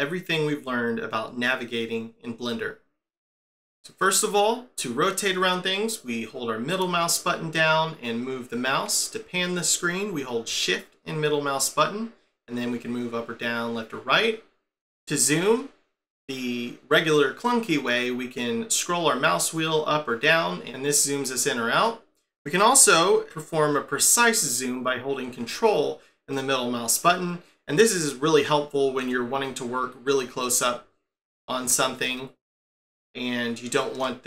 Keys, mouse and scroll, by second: 6.0 middle click, 10.6 shift+middle click, 18.9 scroll up 3, 19.8-20.6 scroll down 4, 20.6-21.3 scroll up 2, 21.7-24.2 scroll down 1, 26.3 ctrl+middle click.